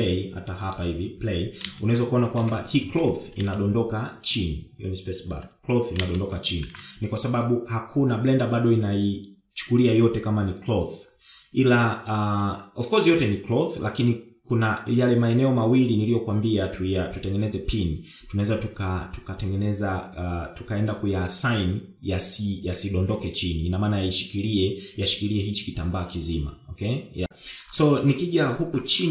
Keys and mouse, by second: 1.1 click, 2.9 shift+Left, 3.9 space, 7.2 shift+Left.